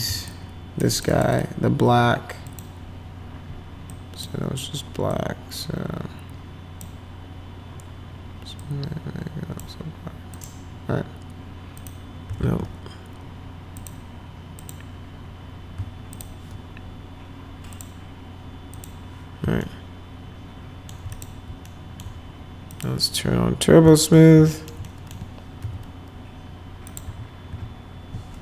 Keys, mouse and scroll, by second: 0.3 shift+click, 0.9 click, 1.1 click, 1.4 click, 2.5 click, 3.9 click, 5.1-6.8 drag, 8.6 click, 10.4 click, 11.8 click, 12.4 ctrl+z, 13.8 click, 14.6 click, 16.2 ctrl+click, 17.7 click, 18.7 click, 19.6-20.9 alt+middle drag, 21.1 click, 21.7 alt+middle click, 22.7 click, 23.9 alt+middle click, 24.5 alt+middle click, 24.8 middle click, 25.6 F4, 26.9 click, 27.0 F4, 27.5 F4.